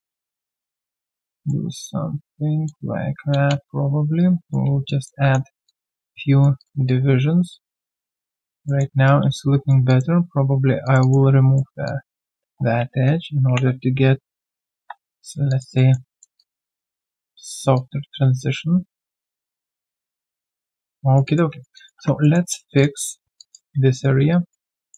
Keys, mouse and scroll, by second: 1.1 middle click, 1.4 middle click, 3.3 Return, 3.3 middle click, 4.2 alt+right click, 4.6 q, 4.8 alt+click, 5.2 alt+3, 5.2 click, 5.6 alt+click, 6.1 right click, 6.8 alt+click, 8.1 alt+right click, 8.3 alt+click, 8.6 alt+middle click, 8.9 alt+right click, 9.3 right click, 9.9 alt+click, 11.0 double click, 11.5 alt+middle click, 11.8 alt+click, 14.7 Delete, 15.2 alt+right click, 15.5 alt+click, 15.7 alt+middle click, 16.4 alt+click, 16.8 alt+right click, 17.7 alt+click, 19.6 alt+middle click, 19.9 alt+click, 20.7 alt+middle click, 21.0 alt+right click, 21.2 alt+click, 21.5 alt+right click, 21.7 alt+click, 21.9 1, 22.2 alt+middle click, 22.5 alt+right click, 23.1 q, 23.4 alt+click, 23.6 1, 23.9 alt+right click, 24.3 right click, 24.3 q.